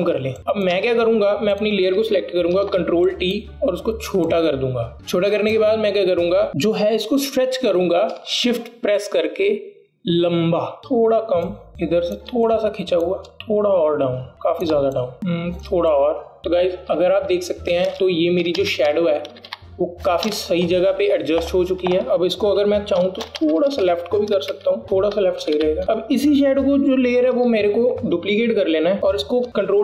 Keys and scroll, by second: 0.3 alt+space, 0.9 alt+space, 3.7 ctrl+t, 17.5 Down, 17.9 Up, 19.5 Up, 19.7 Up, 19.8 Up, 20.0 Up, 20.5 Down, 20.6 Down, 21.3 Return, 24.3 Right, 24.5 Right, 24.6 Right, 24.8 Right, 24.8 s, 25.5 r, 25.8 Right, 25.8 Left, 28.4 ctrl+j.